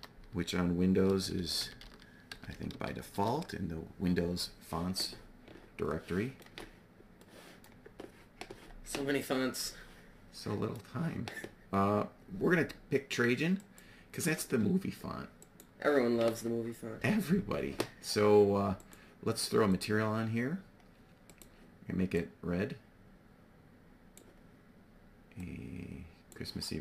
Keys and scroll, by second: 1.0-2.7 typing, 3.1 Return.